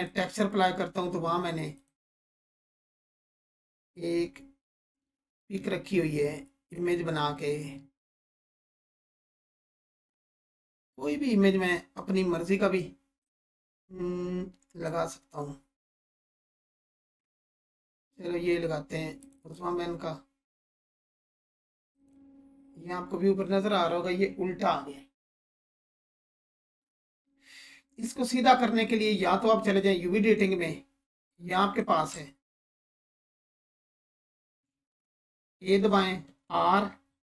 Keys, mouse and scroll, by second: 0.0 click, 2.2-2.8 scroll down 1, 13.2-15.1 drag, 19.2 click, 21.9 click, 29.6 click, 30.8-31.2 scroll up 1, 31.3-31.9 alt+click, 32.1-32.7 ctrl+alt+click, 34.4 a, 35.1 click, 35.4 a.